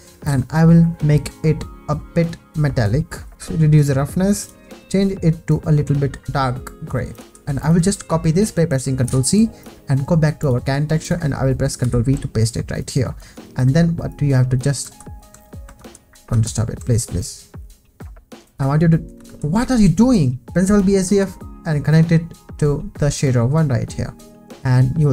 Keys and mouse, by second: 2.3 click, 3.3 click, 7.6 click, 9.0 ctrl+c, 9.6 click, 10.4 click, 11.8 ctrl+v, 12.8 click, 14.1 click, 14.9 ctrl+z, 15.8 ctrl+z, 16.4 ctrl+z, 19.3 ctrl+z, 19.7 ctrl+z, 20.8 click, 21.9 drag.